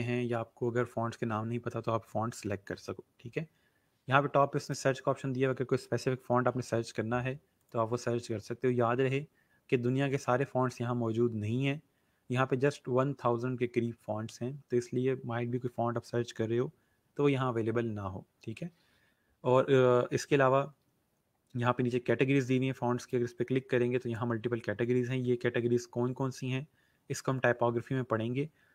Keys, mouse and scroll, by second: 4.6 click, 7.5 click, 22.9 click.